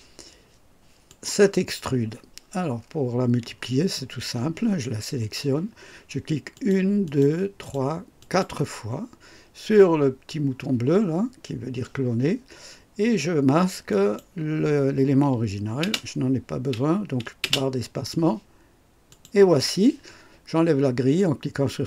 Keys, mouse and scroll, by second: 1.0 click, 6.5 click, 7.0 click, 7.5 click, 8.1 click, 13.8 click, 17.4 space, 19.0 click.